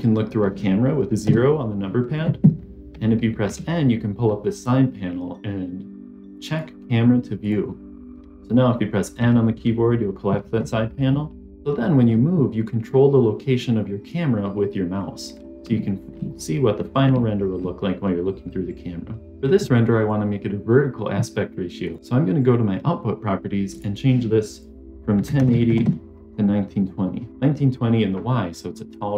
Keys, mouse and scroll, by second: 1.1 KP_0, 3.3 n, 6.2 click, 7.3 click, 9.1 n, 11.7 middle click, 13.4-14.9 middle drag, 15.2 scroll down 1, 15.6 shift+middle click, 16.2 middle click, 17.1-17.5 shift+middle drag, 17.7-19.2 middle drag, 19.2 click, 21.8 click, 23.6-25.8 drag, 26.7 click, 27.3-28.2 scroll down 2, 28.4 scroll down 2.